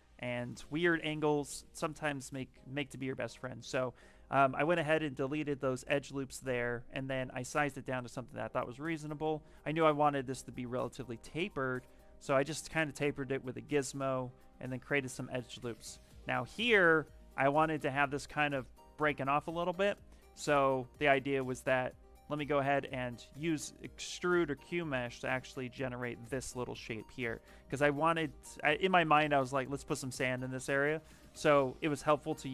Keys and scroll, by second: 3.5 ctrl+shift+z, 5.8 ctrl+shift+z, 6.5 ctrl+shift+z, 7.2 ctrl+shift+z, 7.9 ctrl+shift+z, 8.7 ctrl+shift+z, 9.1 ctrl+shift+z, 13.1 ctrl+shift+z, 13.4 ctrl+shift+z, 14.1 ctrl+shift+z, 16.0 ctrl+shift+z, 22.6 ctrl+shift+z.